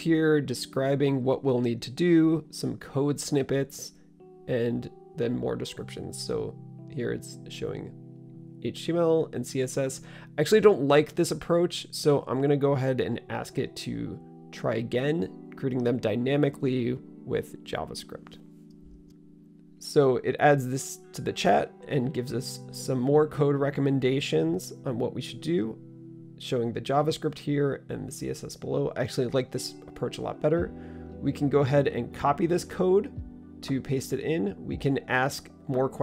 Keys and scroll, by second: 13.9-17.9 typing.